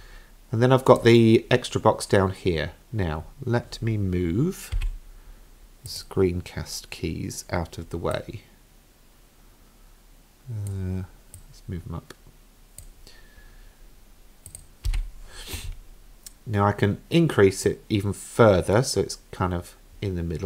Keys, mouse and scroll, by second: 1.0 click, 4.8 n, 5.9 click, 8.1-10.7 drag, 11.4-12.8 drag, 14.5 click, 14.9 n, 17.7-20.4 drag.